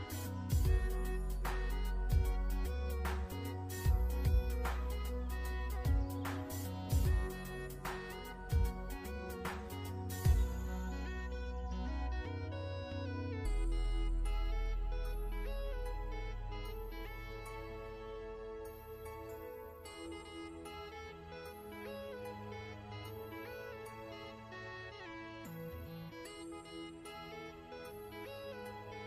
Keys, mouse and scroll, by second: 1.8 alt+shift+scroll down 1, 2.5-3.5 ctrl+scroll up 2, 3.5 click, 6.4-7.4 alt+shift+scroll down 2, 7.4 click, 11.4 z, 11.9 click, 14.2 v, 16.3 shift+Num_Lock, 16.6 shift+click, 17.9 click, 28.7 scroll up 1.